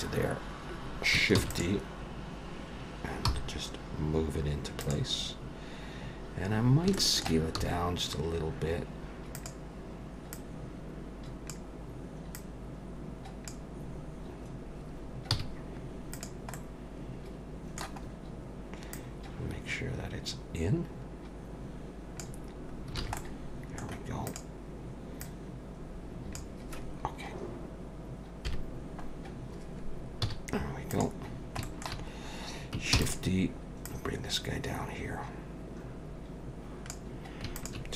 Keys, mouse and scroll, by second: 0.3-1.2 scroll up 1, 1.4 shift+d, 3.3 g, 5.2-6.3 scroll up 1, 6.3-6.9 scroll up 5, 6.9 shift+middle click, 7.6 s, 10.3 click, 12.3 click, 13.9-15.3 scroll down 1, 15.3 scroll down 2, 15.3 z, 16.5 middle click, 18.0-18.9 scroll up 3, 18.9 click, 22.7 scroll down 3, 23.0 alt+a, 23.2 middle click, 24.3 click, 25.2 click, 28.5 KP_1, 30.2 z, 31.3 scroll down 1, 31.6 shift+middle click, 32.1 scroll up 1, 33.0 shift+d, 33.9 click, 37.6 shift+click.